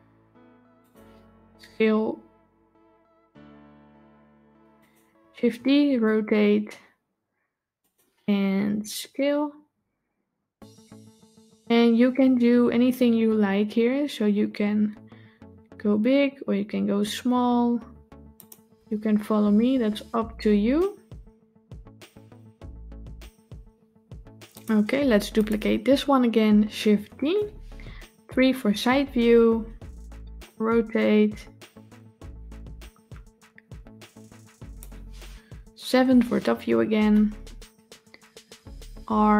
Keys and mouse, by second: 1.3 s, 5.3 shift+d, 25.3 click, 26.7 shift+d, 28.2 KP_3, 30.3-34.7 drag, 35.7 KP_7, 38.3 r.